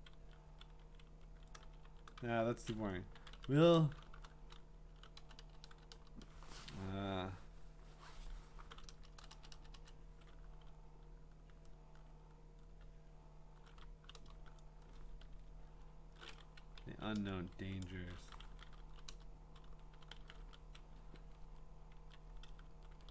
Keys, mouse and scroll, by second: 2.1 Up, 2.1 Down, 2.9-5.9 typing, 8.9-9.8 typing, 13.7-14.2 typing, 15.2 ctrl+z, 16.9 Down, 16.9 typing, 17.8 Up, 18.0 ctrl+shift+Right, 18.2-20.9 typing, 22.0 Down, 22.7 Up, 22.9 Up.